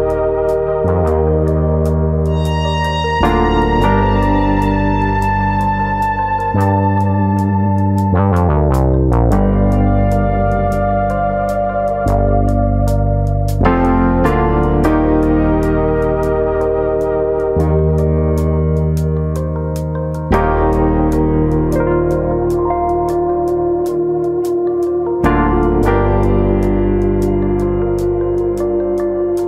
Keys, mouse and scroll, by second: 13.2-14.4 scroll up 1, 14.4 ctrl+KP_Add, 18.9 click, 18.9 i, 19.1 right click, 19.9 i, 20.5 middle click, 20.7 scroll up 3, 20.9 shift+middle click, 21.7 click, 22.6 click, 28.7 click.